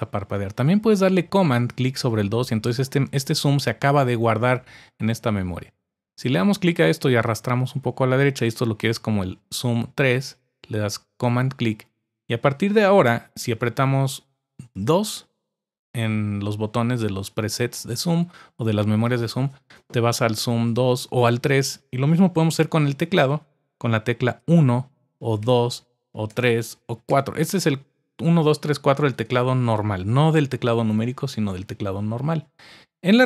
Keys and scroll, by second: 24.4 typing, 25.4-27.1 typing.